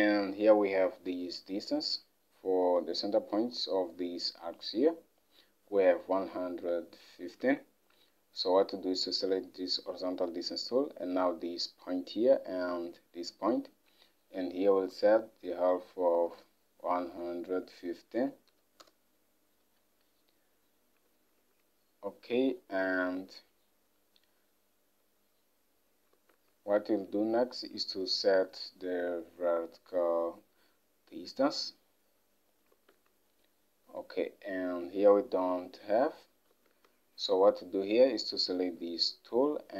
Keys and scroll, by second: 7.5 alt+Tab, 14.7-15.2 typing, 16.3-18.8 typing, 18.9 Return, 21.5 alt+Tab, 33.0 alt+Tab.